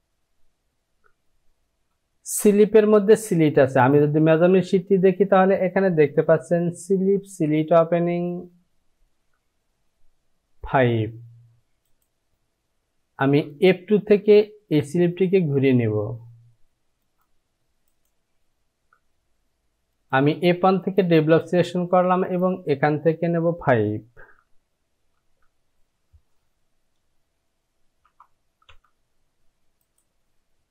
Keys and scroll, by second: 12.3 j, 18.4 Home, 25.8 Down, 28.7 Return.